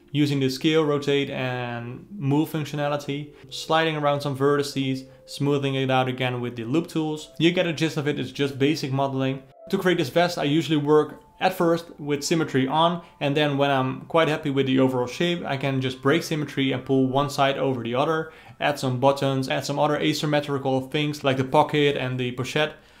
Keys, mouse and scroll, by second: 0.1 alt+middle click, 0.7 s, 1.2 alt+middle click, 1.8 ctrl+r, 2.0 alt+middle click, 2.3 g, 2.6 alt+middle click, 3.5 ctrl+z, 3.7 ctrl+z, 3.8-13.6 typing, 3.9 click, 4.0 alt+middle click, 5.0 alt+middle click, 5.2 click, 5.3 alt+middle click, 5.7 alt+middle click, 6.3 click, 6.7 click, 6.8 alt+middle click, 7.3 alt+middle click, 7.6 alt+middle click, 7.7 click, 7.8 alt+middle click, 8.2 alt+middle click, 8.5 alt+middle click, 8.6 click, 8.7 alt+middle click, 9.0 alt+middle click, 9.4 alt+click, 9.6 click, 9.9 alt+middle click, 10.4 click, 10.6 click, 11.5 click, 11.8 alt+click, 12.1 alt+middle click, 12.3 click, 12.4 alt+middle click, 12.9 alt+middle click, 13.5 click, 13.9 ctrl+z, 14.1 alt+middle click, 14.7 2, 14.7 alt+click, 15.0 click, 15.5 alt+middle click, 15.6 1, 15.7 click, 15.8 g, 16.9 alt+click, 17.0 alt+middle click, 17.6 click, 17.8 g, 18.0-23.0 middle drag.